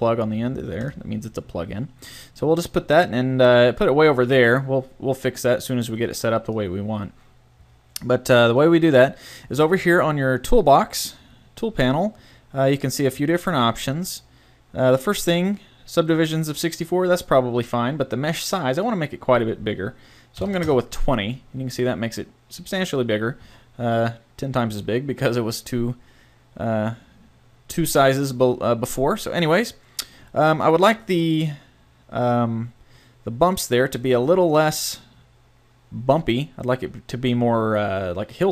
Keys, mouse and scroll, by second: 0.9 typing, 2.4 middle click, 6.1 click, 7.4 click, 7.9 middle click, 8.8-9.8 middle drag, 10.2 middle click, 11.2-12.3 middle drag, 13.7-16.5 middle drag, 13.7 typing, 18.7-20.5 drag, 27.9 typing, 29.1-30.1 middle drag, 34.3 middle click, 34.3 typing, 34.9-36.9 middle drag.